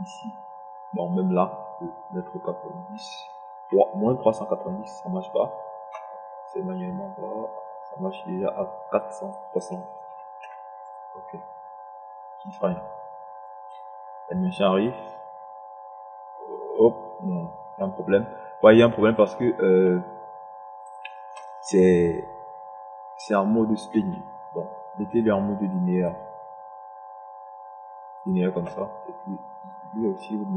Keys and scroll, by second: 5.8 KP_9, 12.2 KP_6, 12.8 KP_0.